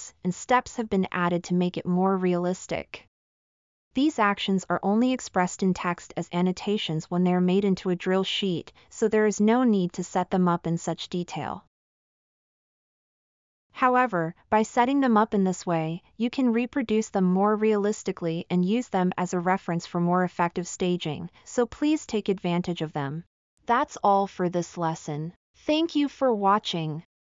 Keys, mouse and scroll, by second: 4.3-5.3 scroll up 10, 14.6-18.3 drag.